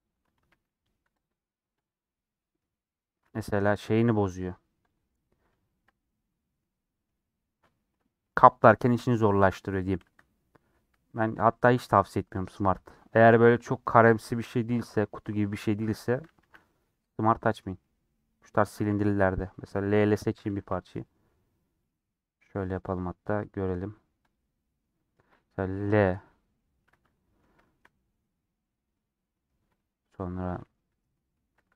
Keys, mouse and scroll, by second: 0.2 Tab, 4.2-4.7 scroll up 2, 4.9 click, 5.0 scroll up 1, 5.1-7.2 middle drag, 7.2-8.7 scroll down 1, 8.7-9.9 scroll down 1, 9.9 Tab, 10.3 middle click, 10.7 scroll down 1, 10.8 scroll up 1, 10.8 a, 11.0 middle click, 11.9 click, 12.4 click, 12.8 scroll down 2, 12.9-16.5 middle drag, 16.5 a, 16.6-20.1 middle drag, 20.1 l, 26.5 middle click, 26.7 scroll up 3, 27.0-31.4 middle drag, 31.4 3.